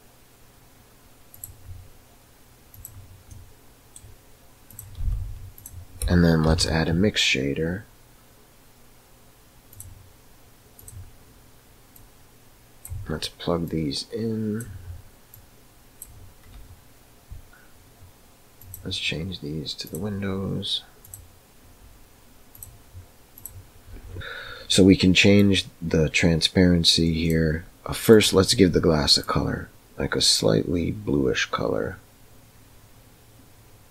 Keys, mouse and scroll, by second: 3.4 middle click, 4.7 click, 4.9 g, 6.4 shift+a, 11.9-12.8 drag, 13.6-14.5 drag, 15.3-16.0 drag, 18.5 click, 22.5 click, 25.5-27.2 drag.